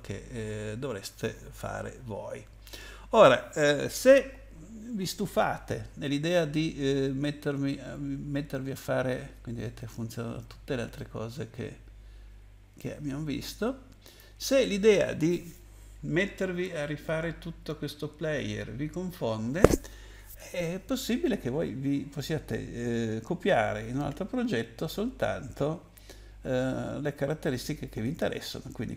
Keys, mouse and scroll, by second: 8.6-9.9 scroll down 3, 9.9-10.3 scroll up 2, 10.9 middle click, 10.9-11.6 scroll up 1, 14.0 click.